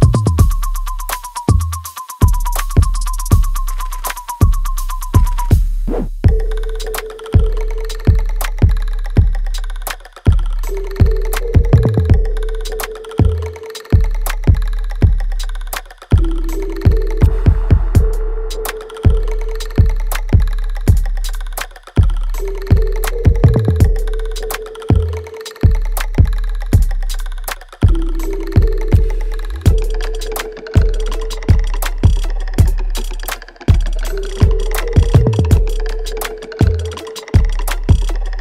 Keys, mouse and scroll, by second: 4.3 right click, 5.3 click, 6.2 w, 6.8-8.2 drag, 8.2 ctrl+z, 8.7-10.0 alt+right drag, 10.0 right click, 11.2 click, 12.8-14.5 right drag, 14.5 right click, 15.4 click, 15.4 click, 16.0 shift+click, 17.0 click, 17.9 ctrl+z, 19.1 click, 20.8 right click, 23.0 alt+right click, 24.0 click, 24.0 click, 24.5-25.8 alt+right drag, 25.8 right click, 27.4 click, 27.8 shift+click, 28.6 click, 30.1 click, 30.5 shift+click, 34.3 click, 36.8-37.3 scroll down 1, 37.4-38.4 alt+drag.